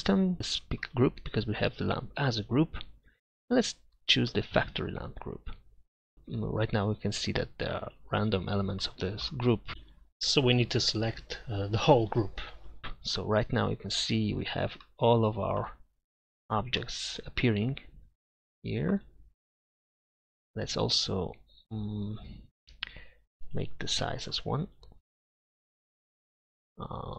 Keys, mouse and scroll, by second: 7.7-11.2 middle drag, 13.4 middle click, 18.0-18.6 middle drag.